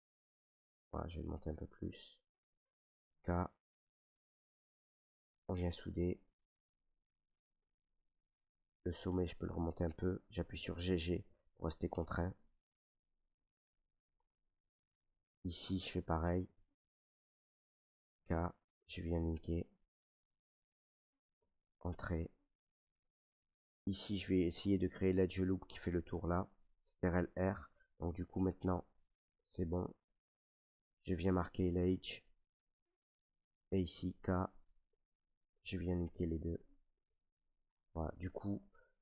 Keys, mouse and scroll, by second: 0.5 click, 1.8-3.0 drag, 3.1 k, 4.1 click, 4.1 k, 5.0 click, 5.8 Return, 6.3 right click, 7.2-8.3 right drag, 8.3-10.5 drag, 10.5 right click, 10.5 g, 10.7 g, 13.2 click, 13.4 middle click, 13.4 middle click, 13.5 middle click, 14.5 shift+middle click, 14.6 shift+middle click, 14.7 middle click, 14.8 middle click, 15.6 middle click, 15.9 middle click, 17.0 right click, 18.1 k, 18.8 click, 20.1 click, 21.3 Return, 21.6 middle click, 21.6 middle click, 21.7 middle click, 21.7 scroll, 22.8-26.8 middle drag, 27.0 ctrl+r, 28.7 click, 29.7-32.0 drag, 32.0 middle click, 33.9 k, 34.9 click, 36.2 click, 37.0 Return, 37.4-39.0 middle drag.